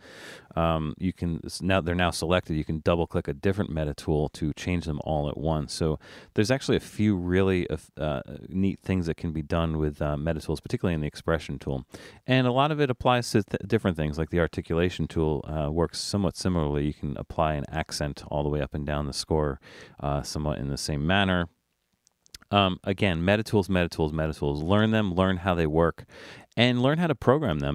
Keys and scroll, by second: 2.9 6, 3.1 6, 9.6 BackSpace, 15.9-17.7 typing, 22.3 super+z.